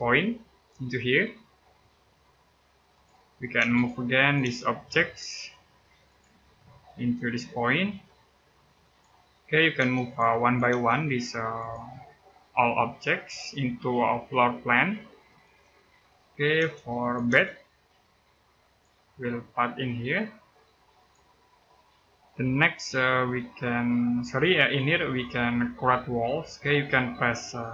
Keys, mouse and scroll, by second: 0.1 middle click, 2.7 click, 3.3 space, 3.5 click, 4.2 space, 4.4-5.0 scroll up 1, 5.8 click, 6.1 scroll down 1, 6.4 middle click, 8.6 click, 9.2 middle click, 9.5 space, 9.8 click, 10.5 space, 11.4 click, 15.1 click, 15.6-15.9 scroll down 1, 15.9 middle click, 16.4 space, 16.8 click, 17.1 space, 17.3 scroll up 1, 18.4 click, 21.3 scroll down 1, 21.4 middle click, 22.5-23.0 scroll up 1, 23.6 middle click.